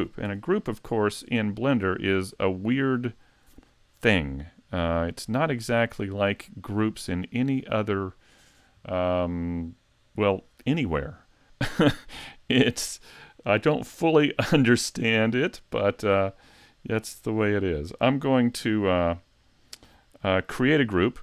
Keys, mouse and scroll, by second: 0.3 a, 2.6 click, 16.5 middle click, 17.9 middle click.